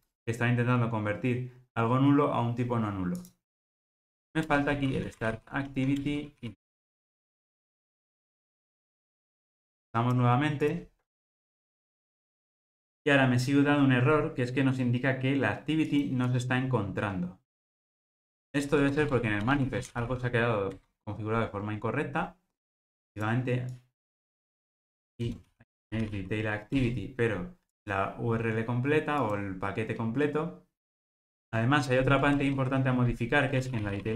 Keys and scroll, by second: 6.0 Return, 8.4 ctrl+r, 26.8 Return, 29.3 ctrl+r.